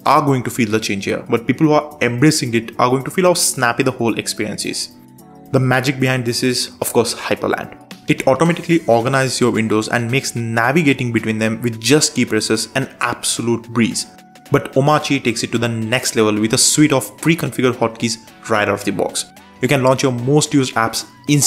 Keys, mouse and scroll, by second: 0.0-1.3 typing, 2.3 Return, 5.9 super+space, 6.5-7.5 typing, 7.6 Return, 9.5 super+j, 10.0 super+j, 11.0 super+j, 11.5 super+j, 13.5 super+Left, 13.9 super+Right, 14.6 super+Left, 15.6 shift+super+Right, 17.0 shift+super+Right, 17.8 shift+super+Left, 18.6 shift+super+Left, 19.8 shift+super+Left, 20.3 Right, 21.0 super+Right.